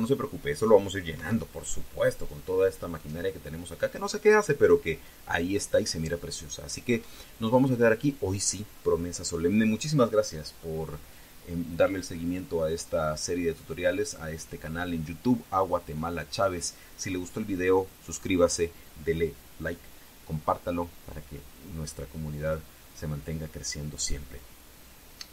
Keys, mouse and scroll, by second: 1.9 Escape, 7.4 scroll down 1.